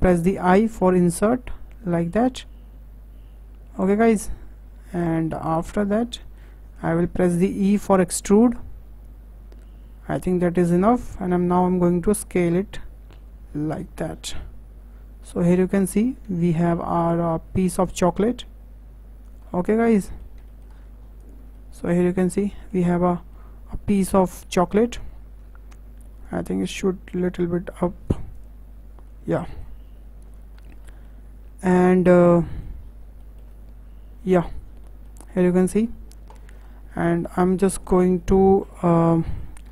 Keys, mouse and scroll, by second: 0.5 i, 5.3 middle click, 5.7-6.1 scroll up 4, 6.1-7.5 shift+middle drag, 7.5 e, 12.2 s, 14.1 scroll down 3, 14.4-16.1 middle drag, 16.1-16.4 scroll down 2, 16.4-17.5 shift+middle drag, 17.5 click, 19.5-20.7 middle drag, 20.7-21.2 scroll down 5, 21.2 click, 21.4 Tab, 21.5 middle click, 22.4 scroll down 2, 22.5-22.9 middle drag, 22.9-23.3 scroll up 5, 23.3-25.4 middle drag, 25.4 Tab, 26.2 click, 26.8 click, 28.3 click, 28.8 Tab, 29.0 scroll down 1, 29.1 middle click, 29.8-30.6 scroll up 7, 30.6-30.9 shift+middle drag, 30.9 scroll down 3, 31.0-32.8 middle drag, 32.8-33.2 scroll up 3, 33.2-34.5 shift+middle drag, 34.5-34.8 scroll down 4, 34.8-35.9 shift+middle drag, 35.9-36.3 scroll down 6, 36.3-36.7 shift+middle drag, 36.7-37.0 scroll down 2, 37.0 shift+middle drag, 37.3-37.6 scroll down 2, 37.6-38.8 middle drag, 38.8-39.2 scroll up 4, 39.2-39.6 shift+middle drag, 39.6-39.7 scroll up 5.